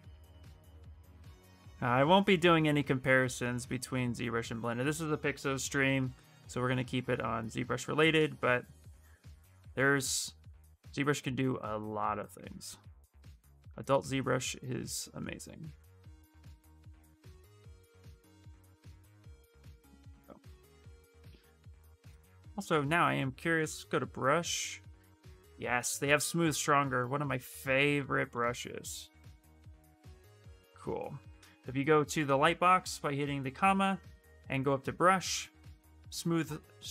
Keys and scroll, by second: 21.1 shift+space, 22.4 ,, 31.7 ,.